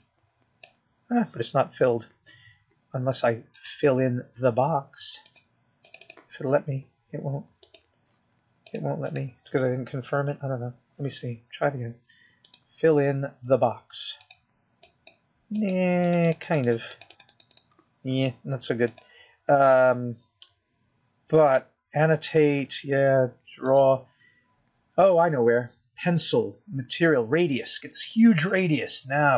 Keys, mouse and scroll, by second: 1.1 click, 2.3 click, 14.8 click, 16.6 click, 17.2 click, 18.0 click, 18.9 click, 19.6 click, 20.7 click, 21.3 click, 23.7 click, 26.1 click.